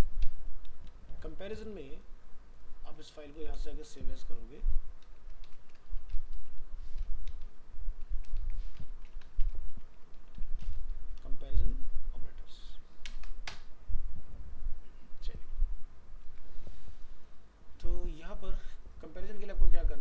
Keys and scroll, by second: 0.2 ctrl+w, 0.9 ctrl+s, 1.1 ctrl+w, 3.2 alt+f, 3.3 alt+移, 8.4 ctrl+shift+Right, 16.2 ctrl+s.